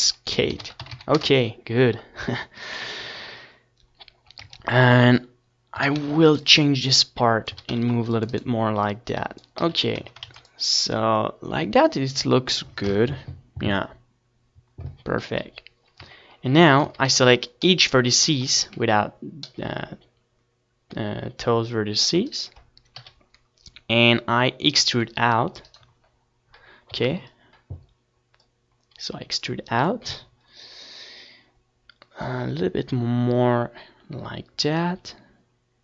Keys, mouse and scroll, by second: 0.6 click, 1.2 Tab, 1.6 z, 2.5 a, 2.7 c, 3.2-5.0 drag, 4.2 a, 4.5 c, 6.3 z, 6.6 Tab, 6.8 ctrl+s, 9.6 middle click, 12.2 KP_1, 13.0 Tab, 13.1-14.6 middle drag, 13.5 a, 13.7 a, 15.3 c, 18.4-20.2 right drag, 18.9 KP_1, 20.6 e, 21.5-23.2 right drag, 23.9-29.4 drag.